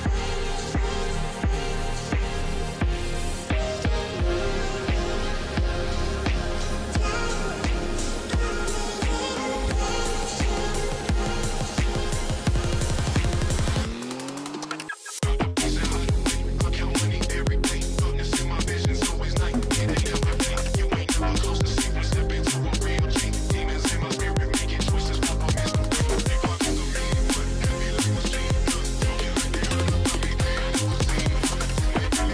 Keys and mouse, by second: 1.0 drag, 2.7 click, 3.2 right click, 7.9 click, 9.6-11.1 drag, 12.8 click, 14.5 click, 14.6-19.6 drag, 15.9 g, 17.6 BackSpace, 17.7 BackSpace, 18.0 BackSpace, 28.2 shift+middle click, 29.2 shift+middle click, 31.2 click.